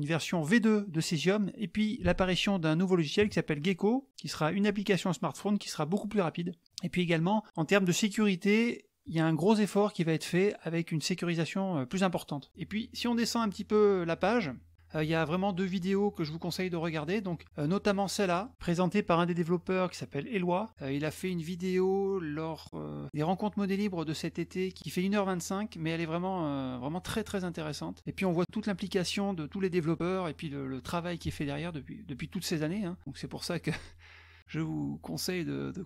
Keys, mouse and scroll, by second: 1.5-2.7 drag, 3.0 click, 3.3 click, 12.8-13.9 scroll down 5, 14.3 scroll down 1, 18.3 middle click, 20.7 click, 24.7 click, 35.1-35.8 scroll up 3.